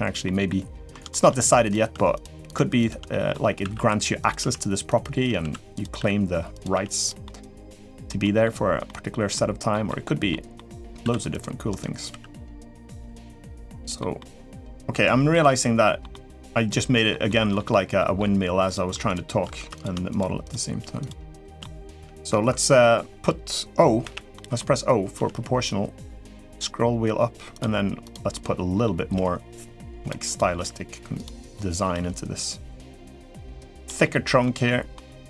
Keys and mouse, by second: 0.0 middle click, 0.9 shift+middle click, 1.4 click, 1.9 shift+click, 2.5 shift+click, 2.8 middle click, 3.4 e, 4.2 s, 5.2 s, 5.7 r, 6.8 g, 7.0 middle click, 7.5 middle click, 8.0 middle click, 8.6 middle click, 9.5 middle click, 9.8 middle click, 10.3 middle click, 10.8 ctrl+r, 11.9 s, 13.0 middle click, 13.9 middle click, 15.1 middle click, 15.9-16.9 middle drag, 17.0 middle click, 17.7 middle click, 18.4 click, 19.3 3, 19.9 shift+click, 20.8 shift+click, 23.8 o, 24.1 middle click, 24.9 g, 28.1 middle click, 28.9 g, 30.0 click, 30.3 g, 31.7 g, 33.8 middle click, 34.4 middle click.